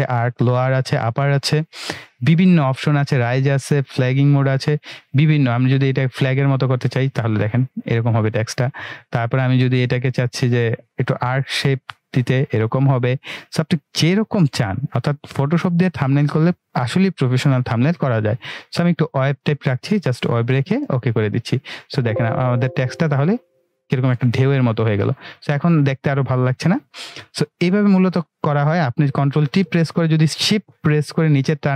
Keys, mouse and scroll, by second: 5.6 click, 18.0-27.4 drag, 24.8-25.4 click, 27.7-28.3 drag, 29.3 ctrl+t, 30.7-31.7 shift+drag.